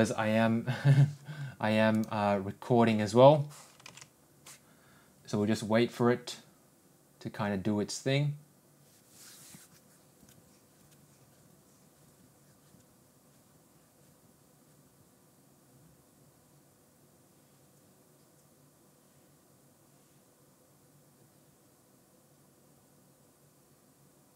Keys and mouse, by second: 2.7 click.